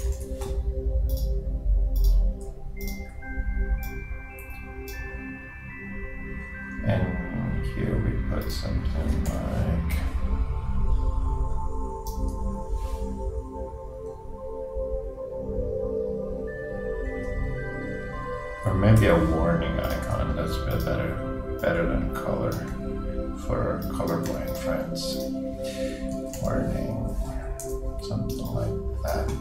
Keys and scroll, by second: 0.0-0.1 typing, 9.3 super+d.